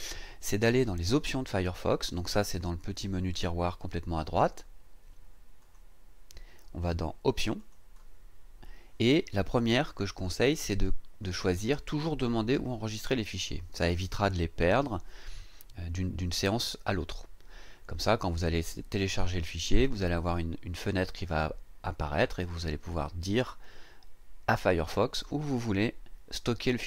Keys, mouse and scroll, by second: 5.6 click, 7.6 click.